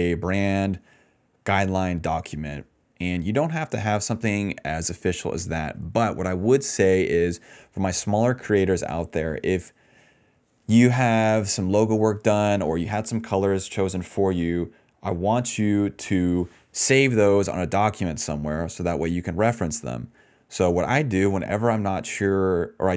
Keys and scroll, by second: 1.5-2.2 typing, 18.1 BackSpace.